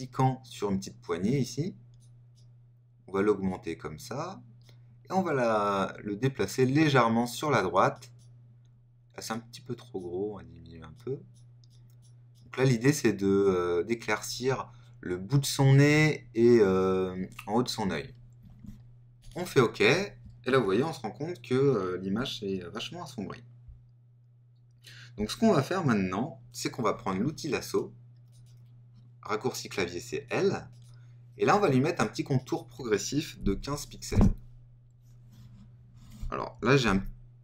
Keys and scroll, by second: 36.8 super++.